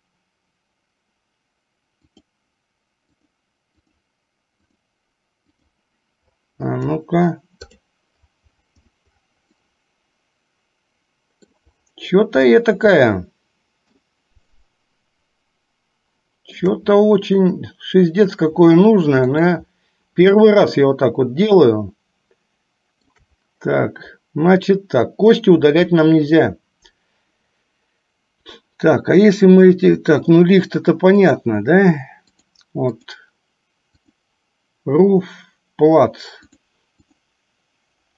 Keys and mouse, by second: 2.3 click, 3.6 click, 4.3 click, 5.2 click, 5.9 click, 7.9 click, 10.1-11.9 middle drag, 13.0-14.0 shift+middle drag, 14.7-16.7 shift+middle drag, 17.5 middle click, 19.8 middle click, 20.7-23.5 shift+middle drag, 31.3 click, 32.7 click, 34.4 drag, 36.6-37.0 drag.